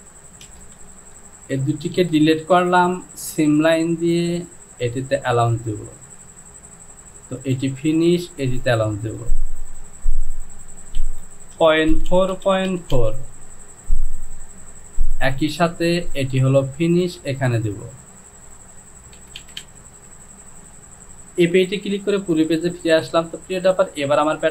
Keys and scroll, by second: 0.5 shift+z, 1.1 shift+z, 11.1 Down, 11.6 KP_Decimal, 11.9 KP_4, 12.1 Down, 12.4 KP_Decimal, 12.7 KP_4, 13.0 Down, 19.3 Down, 19.4 Down, 19.7 Down, 21.5 KP_8.